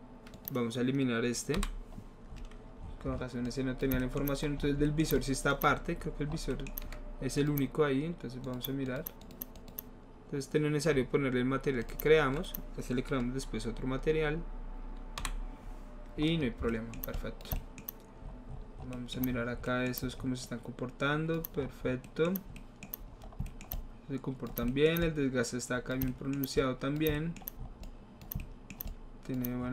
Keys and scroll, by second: 1.6 Delete, 15.3 Delete.